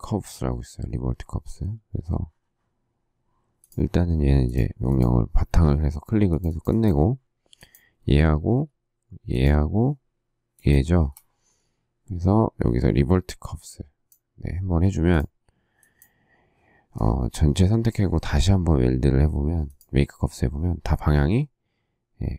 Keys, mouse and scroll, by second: 9.3 shift+click, 10.5 shift+click.